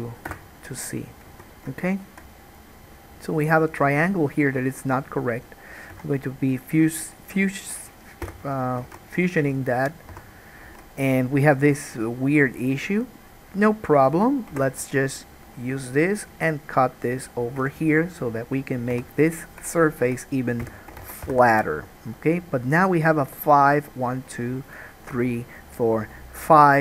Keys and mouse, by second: 1.5 alt+a, 6.0 3, 6.9 shift+middle click, 7.3 shift+click, 7.4-9.8 shift+middle drag, 8.4 f, 9.0 alt+a, 9.8 click, 9.9-13.3 middle drag, 10.3 1, 10.8 alt+a, 14.7 k, 19.2 3, 19.5 click, 20.0 shift+click, 20.8 f, 21.2 alt+a, 21.3-23.0 middle drag, 21.4 1, 23.0 click, 23.4 middle click, 23.8 click, 23.9 middle click, 24.8 click, 24.9 middle click, 25.6 click, 25.7-26.8 middle drag.